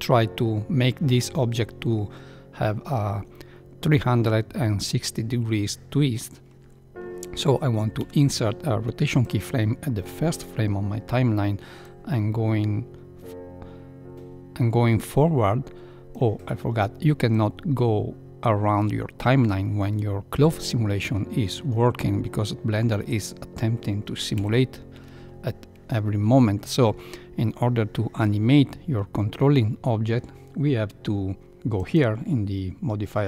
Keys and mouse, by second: 7.9 i, 12.2-16.1 drag, 17.3-19.3 drag, 24.3 shift+Left, 31.7 click.